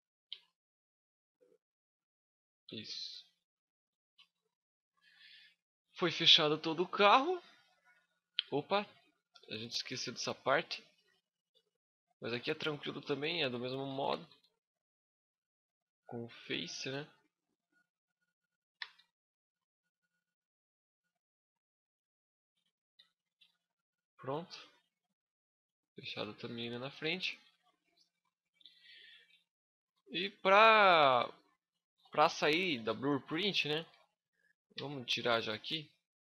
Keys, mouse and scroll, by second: 0.1 scroll up 1, 0.2 middle click, 1.0 click, 2.4 Tab, 2.8 scroll down 6, 3.3 middle click, 3.9 a, 4.1 scroll down 3, 4.5 middle click, 6.2 shift+middle click, 6.8 middle click, 7.9-8.2 scroll up 4, 8.3 shift+middle click, 8.8 middle click, 9.4 Tab, 11.6 click, 12.8 right click, 13.6 shift+right click, 13.8 f, 15.0 right click, 15.8 shift+right click, 16.0 f, 17.7 right click, 18.3 shift+right click, 18.5 f, 19.0 a, 19.4 middle click, 20.6 middle click, 21.4 right click, 22.1 shift+right click, 22.5 f, 22.9 a, 23.2 Tab, 23.3 middle click, 25.0-25.4 scroll down 3, 25.4 middle click, 27.3 shift+scroll up 1, 27.4 shift+middle click, 28.3 scroll up 3, 28.5 middle click, 29.1 shift+middle click, 29.9 scroll up 1, 30.0 middle click, 31.0-31.7 scroll down 2, 31.5 shift+middle click, 32.2 KP_1, 32.5 KP_5, 33.3 shift+middle click, 34.5 n, 36.0 click.